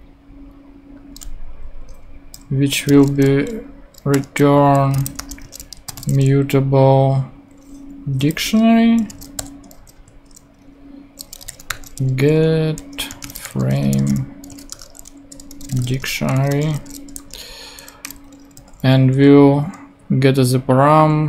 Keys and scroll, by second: 2.9 space, 4.1-6.4 typing, 8.0 Down, 8.4 Return, 9.1 space, 9.4 shift+8, 10.0 shift+Right, 11.2-18.5 typing.